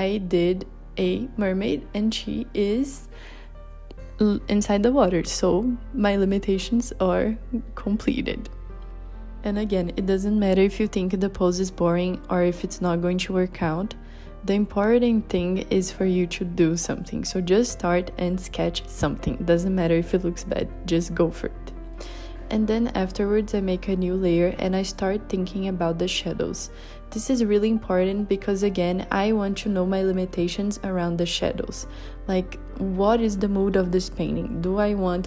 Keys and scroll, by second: 7.7 b, 8.6 h, 11.1-15.7 typing, 18.1 b, 33.4 super+z.